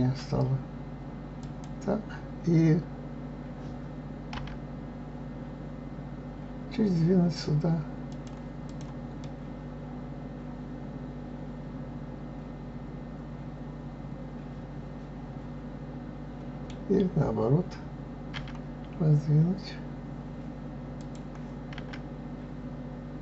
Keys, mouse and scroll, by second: 8.6 click, 9.2-12.2 middle drag, 21.0 click, 21.7 s.